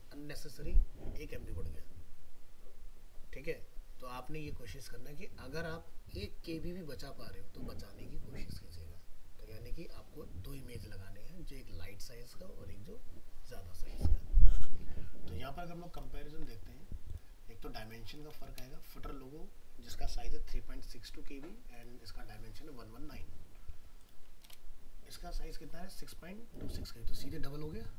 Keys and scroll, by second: 18.6 alt+Return, 24.5 alt+Return.